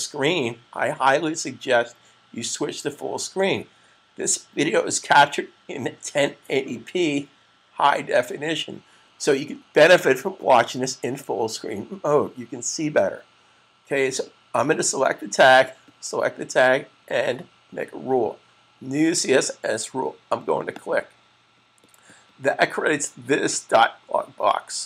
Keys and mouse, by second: 20.5 click.